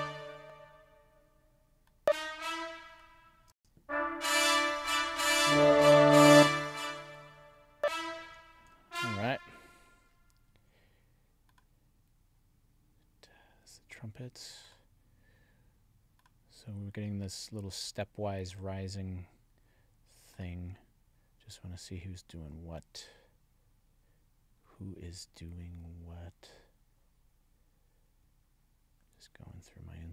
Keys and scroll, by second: 3.4 space, 6.2 space, 8.6 alt+Up.